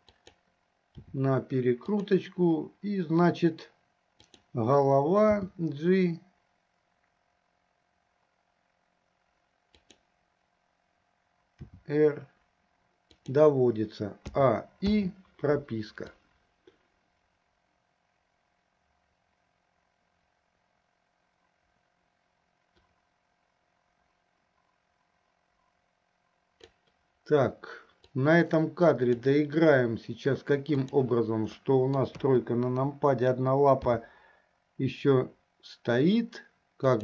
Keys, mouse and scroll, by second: 1.2 r, 4.3 click, 5.6 g, 11.7 r, 14.6 a, 15.3 i, 16.4-27.0 drag, 28.4 click, 30.8 click, 31.8 middle click, 32.4 KP_3, 34.2 g.